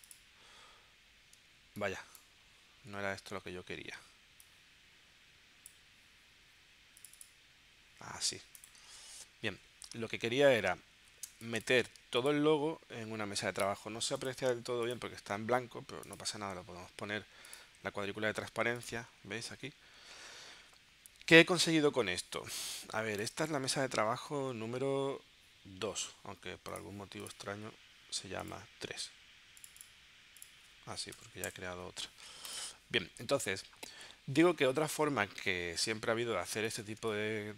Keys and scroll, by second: 3.0 super+z, 8.5 v, 11.3 space, 31.2 BackSpace, 31.3 2, 31.5 Return, 37.1 space.